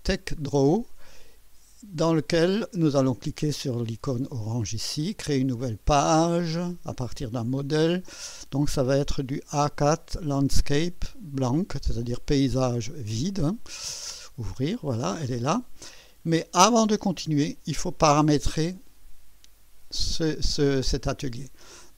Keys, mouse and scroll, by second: 6.0 click, 7.3 scroll down 1, 12.6 click, 14.1 click.